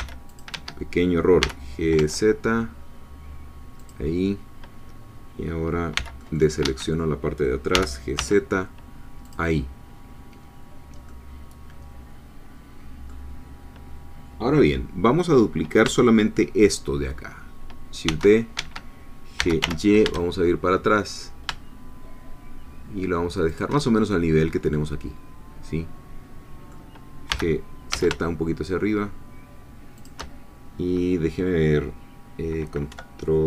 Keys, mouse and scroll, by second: 0.0 c, 0.3 click, 0.5 Escape, 1.4 g, 2.0 z, 3.8 click, 5.9 c, 6.2 click, 6.6 Escape, 7.7 g, 8.2 z, 9.2-11.1 drag, 11.1-15.8 middle drag, 18.1 shift+d, 18.5 Escape, 19.4 g, 19.6 y, 23.5 shift+click, 23.8-27.3 shift+middle drag, 27.3 g, 27.9 z, 30.0 shift+click, 32.9 Right.